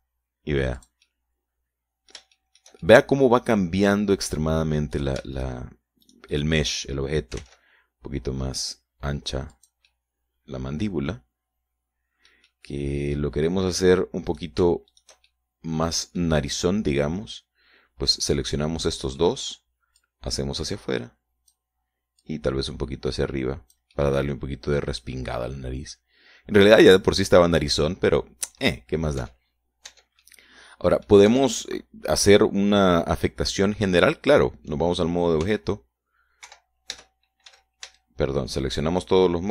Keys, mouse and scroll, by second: 0.2-1.1 typing, 2.2-3.7 drag, 3.7 shift+middle click, 4.3-6.0 shift+middle drag, 6.4 shift+right click, 6.8 shift+right click, 7.5 shift+right click, 8.5-9.4 typing, 10.9 click, 11.3-14.8 middle drag, 14.9 middle click, 15.7 right click, 16.3 shift+right click, 16.7-17.8 shift+middle drag, 19.7 middle click, 20.6 middle click, 21.4-23.1 drag, 23.7-25.4 drag, 25.4-30.1 middle drag, 30.7 Tab, 31.3 Tab, 31.7-32.7 middle drag, 32.7 Tab, 33.1-35.6 middle drag, 36.9 s, 37.9 Escape, 38.3 Tab, 38.9 a.